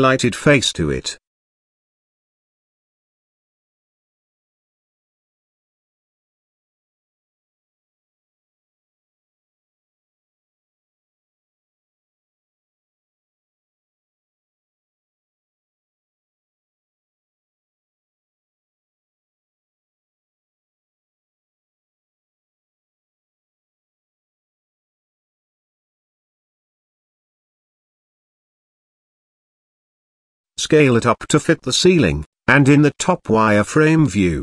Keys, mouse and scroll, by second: 0.0 Tab, 0.8 click, 1.4 Tab, 1.9 click, 2.8 click, 3.2 click, 3.7 click, 4.2 middle click, 4.8 g, 6.3 g, 11.1 KP_0, 13.8 click, 14.7 click, 15.6 click, 17.0 KP_Decimal, 18.0 middle click, 19.3 s, 21.0 click, 22.6 s, 24.4 scroll up 1, 24.4 middle click, 25.3 s, 26.2-26.6 scroll up 1, 27.6 g, 29.5 middle click, 31.3 KP_7, 31.9 z, 32.9 shift+middle click, 33.9 g.